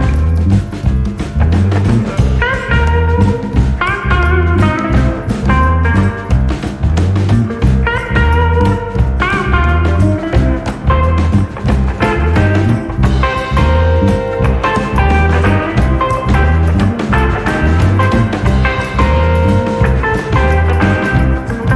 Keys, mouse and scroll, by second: 5.3 click, 7.8 ctrl+a, 16.2 click, 19.1-21.7 middle drag.